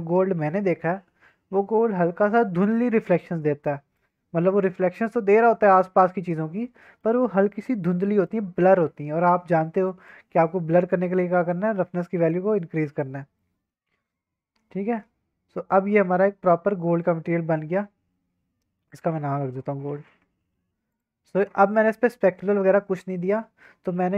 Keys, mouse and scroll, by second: 1.6 scroll down 1, 1.8-2.1 scroll up 2, 2.1 scroll down 1, 3.7 scroll up 1, 3.9-7.0 middle drag, 8.0-8.3 middle drag, 9.8 middle click, 11.4-13.0 drag, 13.3-13.7 middle drag, 13.7-14.0 drag, 14.0 middle click, 14.1 click, 14.1-16.5 middle drag, 16.3 click, 16.5-16.9 drag, 16.9 middle click, 17.0 scroll down 1, 17.2 middle drag, 17.6-18.0 scroll up 2, 18.0-18.8 scroll down 2, 18.8-20.9 shift+drag, 23.3-23.6 scroll down 2, 23.6-24.1 scroll up 2.